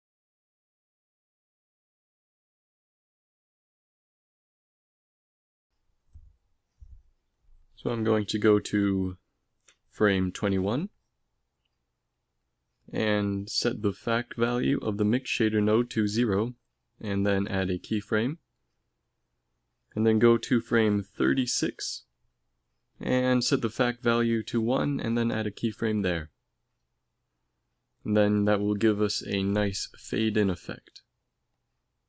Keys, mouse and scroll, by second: 1.9-3.0 drag, 3.9 middle click, 17.2 i, 21.8 Right, 22.0 Right, 24.9 i, 27.5-29.4 Left, 30.0 shift+z, 30.8 Right, 31.4 Right, 31.7 Right, 31.9 Right.